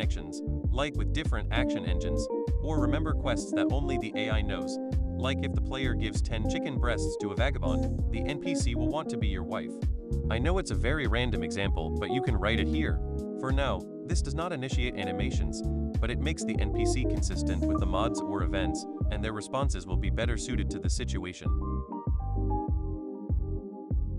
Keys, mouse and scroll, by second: 0.4 click, 1.9 click, 5.3 click, 7.9 click, 9.3 click, 10.6-12.5 drag, 14.5-18.6 drag, 19.1 click, 20.3 click, 21.5 click, 23.4 click, 23.6 click, 23.8 click.